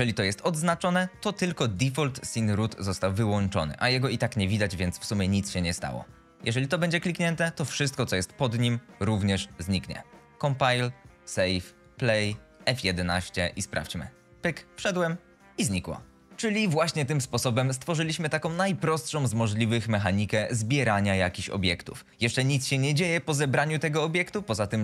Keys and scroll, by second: 12.5 F11, 13.0 s, 13.7 d.